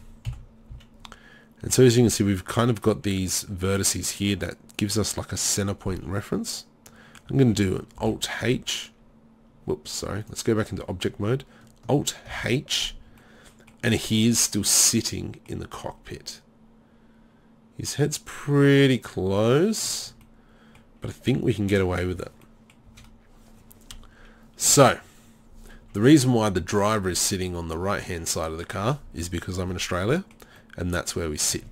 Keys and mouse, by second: 0.3 KP_7, 0.7 z, 5.9 z, 6.2-6.8 drag, 8.0 alt+h, 12.4 alt+h, 14.0 z, 14.9 middle click, 15.1 middle click, 15.3 middle click, 18.9-19.3 middle drag, 19.3 z, 20.0 z, 22.1 z, 22.9 z, 24.7 KP_1.